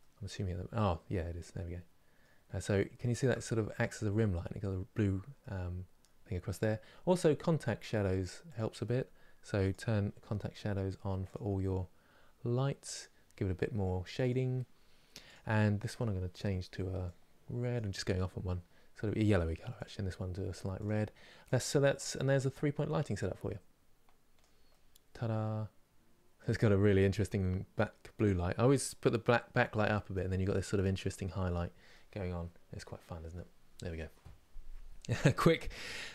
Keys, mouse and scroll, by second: 2.1 scroll up 3, 2.7-8.1 shift+middle drag, 8.1 click, 10.9 click, 13.9 click, 19.5 click, 21.1 click, 24.4-27.4 middle drag, 31.6-36.1 middle drag.